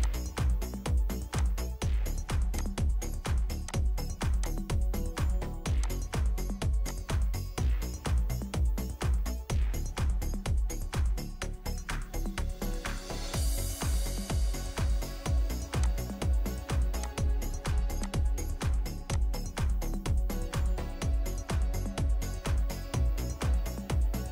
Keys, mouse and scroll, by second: 3.7 ctrl+click, 7.7-8.8 scroll up 1, 9.6 scroll down 1, 14.6-17.0 scroll up 1, 23.0 1, 23.3 Return.